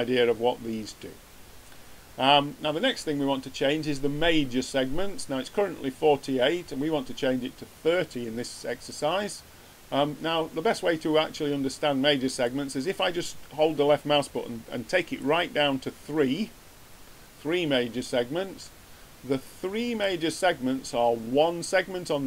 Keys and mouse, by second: 12.4-14.2 middle drag, 18.5-22.2 middle drag.